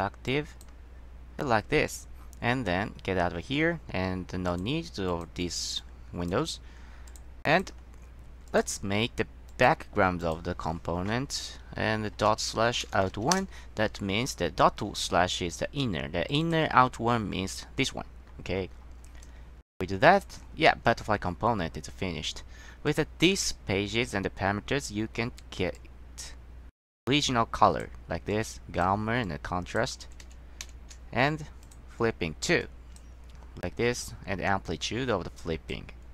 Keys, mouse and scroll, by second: 0.4 click, 1.6-2.0 scroll down 1, 2.4-3.0 scroll down 1, 4.6 click, 5.2 click, 5.9-6.4 drag, 7.2 click, 7.6 click, 8.6 click, 9.6 click, 10.3 click, 12.3-13.8 typing, 16.4 click, 16.6 click, 18.4-19.5 scroll down 2, 19.9-20.4 drag, 23.0 click, 25.9-27.9 drag, 28.4-29.0 drag, 29.4 click, 30.2 ctrl+z, 30.4 ctrl+z, 31.8 click, 32.7-33.1 drag, 34.2-35.9 drag.